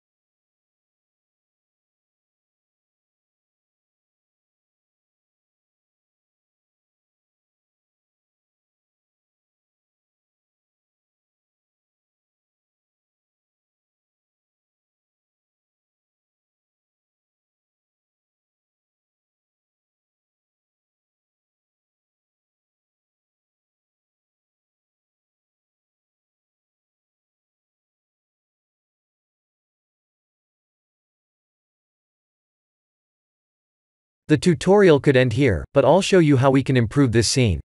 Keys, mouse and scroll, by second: 5.1 click, 6.0 middle click, 6.6-7.5 scroll down 2, 7.5 click, 8.4 click, 9.0 click, 10.0 click, 10.4 click, 11.5 click, 12.1 click, 13.4 click, 13.9 click, 14.8 click, 15.3 click, 16.7 click, 17.3 click, 18.5 click, 19.1 click, 20.6 click, 21.3 click, 22.2 click, 22.8 click, 23.9 click, 24.5 click, 25.3 click, 25.8 click, 27.5 click, 28.0 click, 29.6 middle click, 32.5 click, 33.2-34.0 scroll down 6, 34.0 middle click, 34.8 click, 35.1 middle click, 35.8 shift+middle click, 36.2 middle click, 36.8 scroll up 2, 37.3 click, 37.6 click.